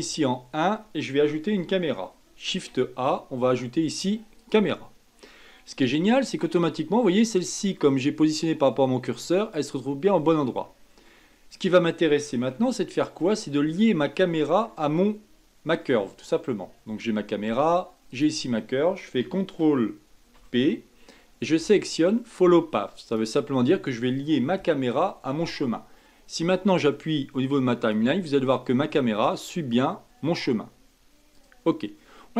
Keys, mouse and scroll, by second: 0.0 KP_1, 2.4 shift+a, 5.8 middle click, 6.6-7.1 scroll up 6, 7.1 middle click, 7.7-10.4 scroll up 1, 10.6-11.0 scroll down 3, 11.0-13.3 middle drag, 13.3-14.1 shift+scroll up 1, 14.1-17.1 middle drag, 18.1 shift+click, 20.3 ctrl+p, 27.8-29.1 drag, 29.1-31.3 scroll down 8, 31.3 click, 31.8-32.3 scroll up 5.